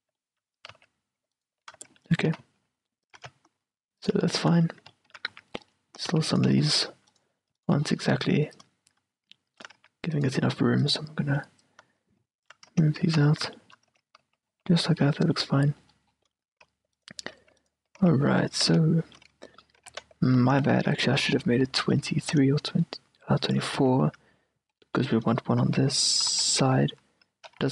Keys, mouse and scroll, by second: 0.9 z, 1.5-4.1 middle drag, 2.4 s, 3.3 g, 4.5-8.7 middle drag, 5.4 a, 6.2 c, 6.5-9.7 right drag, 6.7 z, 8.7-13.7 drag, 9.9 a, 10.3-12.6 right drag, 12.9 Tab, 13.2 z, 13.7 middle click, 14.1 Tab, 14.3 z, 14.6 z, 17.1-21.1 middle drag, 18.1 z, 18.8 z, 19.9 g, 21.3 q, 21.8 z, 22.5-24.4 drag, 23.9 q, 24.8-27.1 middle drag, 25.8 a, 26.4 z, 26.7 q, 27.3-27.7 middle drag, 27.6 q.